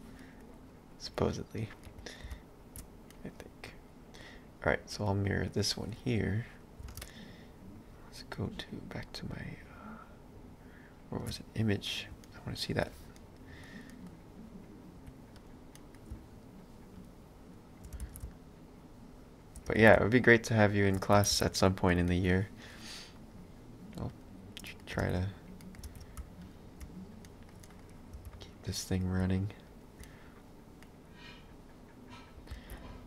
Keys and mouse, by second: 1.1 click, 1.8 middle click, 2.3 shift+x, 3.2 middle click, 7.0 ctrl+alt+shift+space, 12.3 ctrl+middle click, 15.4 click, 15.7 middle click, 16.3 shift+click, 17.9 space, 21.2 a, 21.6 middle click, 24.2 click, 24.7 middle click, 25.0 ctrl+space, 25.6 middle click, 25.9 ctrl+space, 26.5 alt+click, 27.2 middle click, 28.2 b, 30.1 middle click, 32.5 ctrl+z.